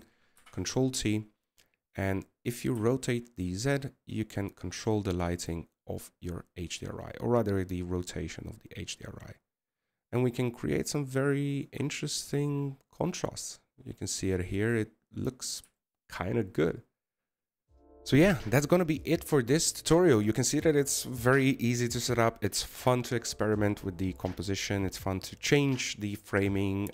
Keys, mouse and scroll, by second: 13.4 scroll up 2, 17.7 scroll up 1.